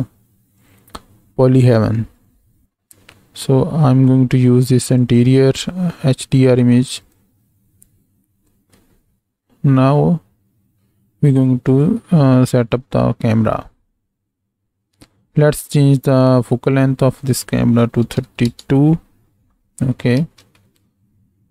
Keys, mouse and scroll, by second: 8.4 z, 11.7 click, 17.2 click, 20.3 ctrl+space.